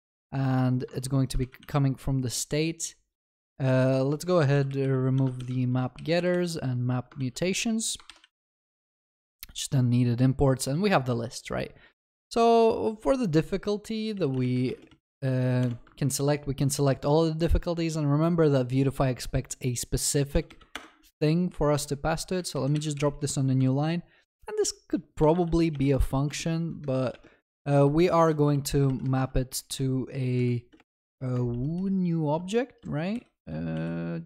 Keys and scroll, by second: 1.4 ctrl+c, 1.4 ctrl+v, 4.5 ctrl+Delete, 6.1 ctrl+Delete, 7.1 ctrl+Delete, 8.0 ctrl+s, 8.2 ctrl+s, 15.6 Return.